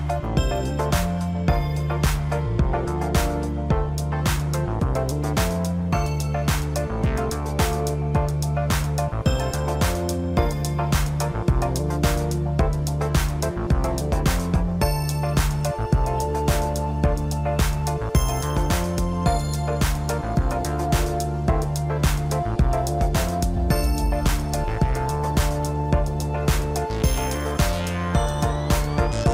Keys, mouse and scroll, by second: 1.8 click, 3.5 click, 4.6 click, 5.1-6.4 drag, 7.9 click, 8.6 click, 9.9 click, 11.0-14.4 drag, 17.7-18.2 scroll up 2, 18.2-19.4 middle drag, 19.4 drag, 22.1-23.0 scroll down 14, 24.1 click, 27.2 click.